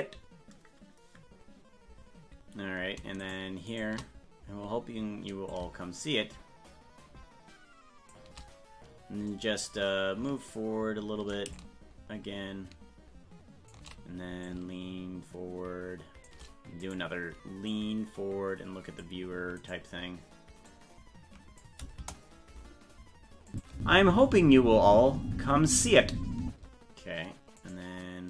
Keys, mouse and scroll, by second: 3.3 shift+right click, 5.5-8.1 drag, 11.6-13.7 shift+drag, 14.4-16.3 drag, 16.9 right click, 17.7-19.0 drag, 19.7 right click, 20.7 click, 23.5 click, 23.7 space, 27.7 right click.